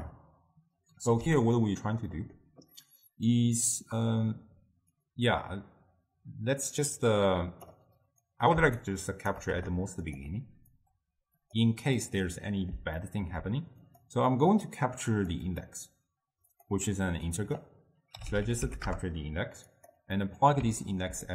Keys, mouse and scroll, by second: 1.0 ctrl+h, 1.5-2.2 drag, 2.2-5.0 middle drag, 5.0 click, 8.3 click, 8.9 shift+right click, 9.6 g, 10.8 click, 12.3-13.9 middle drag, 13.9-15.3 drag, 15.5-19.9 drag, 20.2 middle click, 20.9-21.3 ctrl+middle drag.